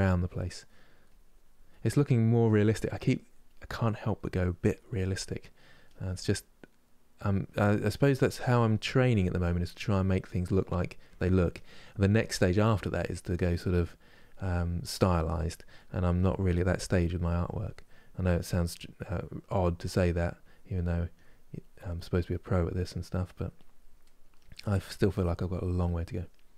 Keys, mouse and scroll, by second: 0.4 middle click, 0.8 click, 1.4 middle click, 1.8 click, 2.5 middle click, 2.9 click, 3.5 middle click, 3.9-5.2 drag, 5.2 middle click, 5.6 click, 6.4-7.8 middle drag, 7.8-8.8 drag, 8.8 middle click, 9.2-10.3 drag, 10.3 middle click, 11.2 click, 12.1-13.4 middle drag, 13.4 click, 14.2 middle click, 14.7 click, 15.5 middle click, 16.0 click, 16.7 middle click, 17.0 click, 18.0-19.1 middle drag, 19.1 click, 19.6 middle click, 20.1 click, 20.4 middle click, 20.8 click, 21.7 middle click, 22.0 click, 22.5 middle click, 23.0 click, 23.7 middle click, 24.1-25.1 drag, 25.1 middle click, 25.6 click, 26.3 middle click.